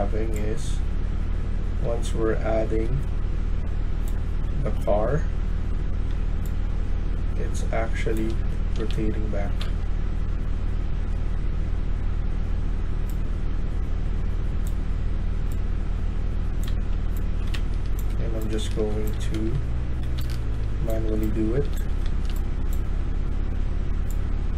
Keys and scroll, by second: 1.7-2.7 s, 8.7 ctrl+z, 10.8 Tab, 16.5-22.6 typing.